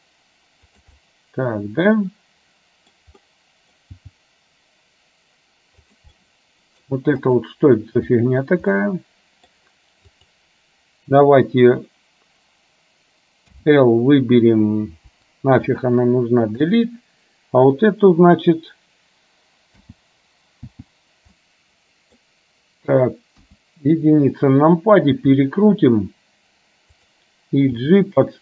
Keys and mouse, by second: 1.1 middle click, 3.0 middle click, 3.3 middle click, 4.0 g, 6.2 middle click, 7.3 click, 8.8 middle click, 10.3 click, 15.1 Delete, 20.7 l, 21.6 middle click, 23.5 KP_1, 25.2 r, 27.8 g.